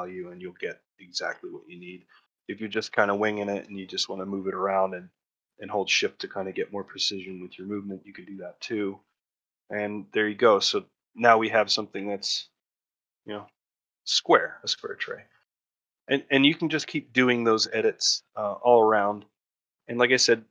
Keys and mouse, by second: 0.9 ctrl+middle click, 1.2 shift+middle click, 1.5 middle click, 2.1 middle click, 2.4 shift+middle click, 2.7 ctrl+middle click, 3.1 shift+middle click, 3.6 shift+middle click, 7.9 middle click, 8.3 shift+middle click, 8.6 ctrl+middle click, 8.8 shift+middle click, 9.2 middle click, 9.7 shift+middle click, 10.1 shift+middle click, 10.8 middle click, 11.3 middle click, 12.2 shift+middle click, 12.6 middle click, 13.0 middle click, 14.0 shift+middle click, 14.3 middle click, 15.7 middle click, 16.1 alt+middle click, 17.3 ctrl+shift+middle click, 18.2 shift+middle click, 20.3-20.5 drag.